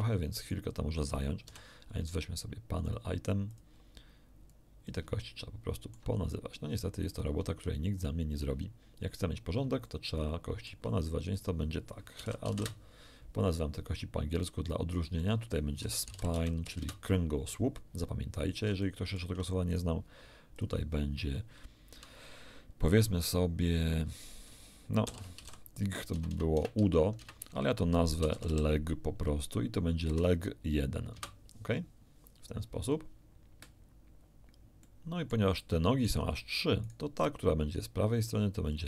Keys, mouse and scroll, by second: 0.4 shift+right click, 1.5 n, 2.9 click, 3.5 click, 4.5 click, 5.2 ctrl+middle click, 7.1 ctrl+click, 7.9-8.6 ctrl+scroll up 2, 9.9-10.9 shift+drag, 11.3 shift+click, 12.2 h, 12.5 e, 12.5 a, 12.5 d, 12.6 Return, 14.3 click, 15.2 click, 15.8-16.7 typing, 16.8 Return, 18.5 scroll down 1, 18.8 shift+middle click, 18.9 shift+click, 19.7 shift+middle click, 20.5 click, 25.1-26.6 typing, 28.3 l, 28.5 e, 28.5 g, 30.0 l, 30.7 1, 31.1 Return, 34.8 middle click, 34.9 click, 35.6 middle click, 35.7 click, 36.9 right click, 38.7 click.